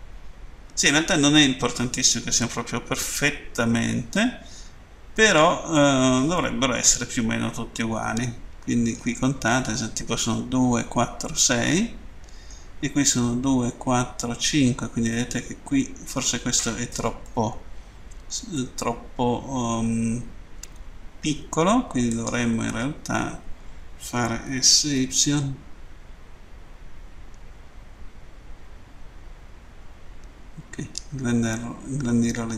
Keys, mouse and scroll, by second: 11.5 middle click, 15.1 middle click, 17.3 middle click, 18.6 middle click, 21.9 right click, 25.5 typing.